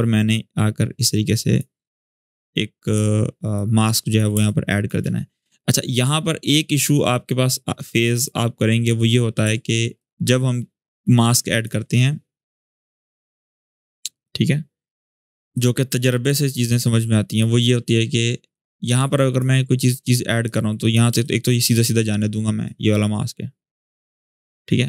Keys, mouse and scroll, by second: 0.1-1.3 alt+drag, 4.1 space, 4.2-4.8 click, 4.6 space, 5.7-8.2 drag, 9.7-11.6 alt+drag, 20.2-20.8 click, 20.8 space, 21.0-21.6 click, 21.3 space, 22.4-24.2 drag.